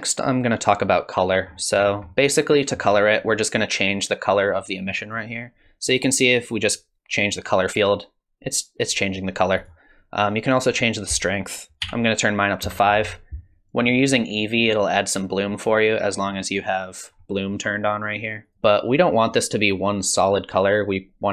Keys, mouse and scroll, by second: 1.5-2.9 scroll up 9, 2.1 middle click, 2.9-4.9 scroll up 1, 4.9 scroll up 1, 5.0 click, 6.6 click, 10.7 click, 16.7 click, 18.1 click, 18.4 click, 18.5 scroll down 2, 19.3 click.